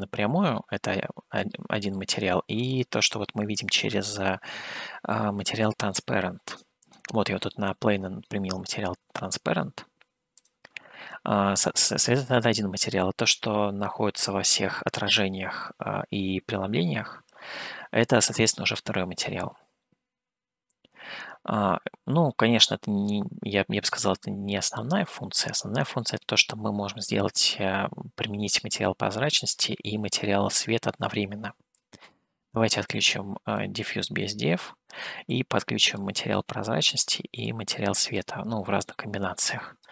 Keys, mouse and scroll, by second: 1.5-4.3 middle drag, 6.8 click, 7.9 scroll down 1, 8.2-9.4 middle drag, 10.5 click, 11.6-19.4 middle drag, 20.7 scroll down 1, 22.6 scroll up 2, 23.7 scroll up 1, 24.1 middle click, 25.6 middle click, 31.8 click, 32.8 click, 35.4 click, 36.5 middle click, 37.5 click, 38.9 click.